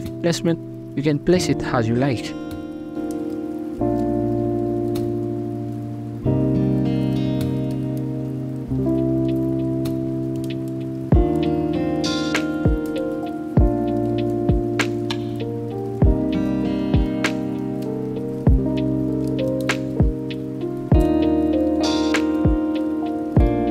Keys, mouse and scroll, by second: 0.0-0.9 typing, 0.1 middle click, 1.3 click, 1.6 click, 2.2 middle click, 2.3 scroll up 2, 2.5 g, 2.6 middle drag, 2.8 scroll up 1, 3.1 shift+middle click, 3.2 alt+right click, 3.7-6.6 typing, 4.1 shift+middle click, 4.2 scroll up 2, 4.5 ctrl+z, 5.0 alt+z, 6.0 Tab, 6.1 middle click, 6.2 scroll up 2, 6.4 right drag, 7.7 scroll down 3, 7.7 middle click, 7.9 shift+a, 8.1 shift+a, 8.9 scroll down 8, 9.1-10.5 drag, 10.5 scroll up 9, 10.7-12.1 drag, 12.3-14.1 typing, 13.1 middle click, 13.6 middle click, 14.3 middle click, 14.5 scroll up 1, 14.7 alt+s, 15.1 Tab, 15.2 middle drag, 15.5 scroll up 1, 16.0-20.9 typing, 16.4 middle click, 16.7 middle drag, 17.0 right click, 17.5 right click, 17.6 middle click, 18.8 middle click, 18.9 right click, 19.3 middle click, 19.8 middle click, 20.0 scroll up 1, 20.3 right click, 20.3 shift+middle click, 20.4 Tab, 21.3-21.9 middle drag, 22.0 scroll up 3, 22.0 shift+middle click, 22.1 KP_1, 22.4 right click, 22.7-23.1 ctrl+z, 23.3 ctrl+z, 23.5 ctrl+z.